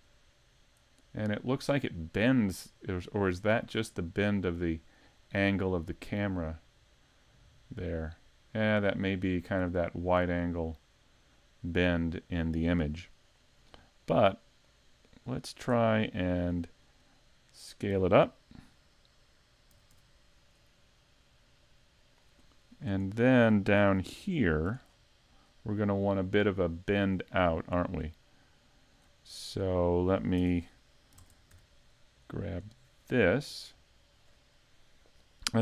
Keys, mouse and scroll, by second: 2.5 scroll down 1, 3.1 middle click, 4.7-5.4 scroll down 1, 5.4 middle click, 13.6 middle click, 14.6 click, 15.9-16.3 scroll down 1, 16.3 middle click, 17.1-17.8 scroll down 2, 19.7 s, 22.1 click, 24.0 shift+middle click, 24.9-25.3 scroll up 5, 25.6 scroll up 4, 27.1 scroll up 4, 27.6 shift+middle click, 28.2 middle click, 29.2 shift+middle click, 30.4 Tab, 30.7 middle click, 31.2 ctrl+Tab, 31.8 middle click, 33.0 right click, 33.5 middle click.